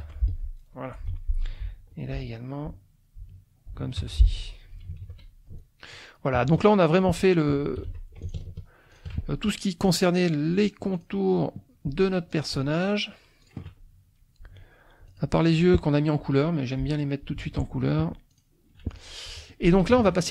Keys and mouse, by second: 0.0 F1, 0.2 click, 1.5 F2, 1.9 click, 2.7-3.9 drag, 4.0 F1, 4.4 click, 5.0 ctrl+s, 5.2 ctrl+click, 6.4 KP_Subtract, 7.9 F2, 8.2 shift+click, 8.9 shift+click, 10.6 click, 10.9 click, 12.3 shift+click, 12.7 shift+click, 13.4 shift+click, 15.1 click, 15.5 click, 15.9 middle click, 16.7 middle click, 17.4 ctrl+s, 18.3 click, 19.0 click, 19.2 F1, 19.5 click, 20.0 ctrl+s.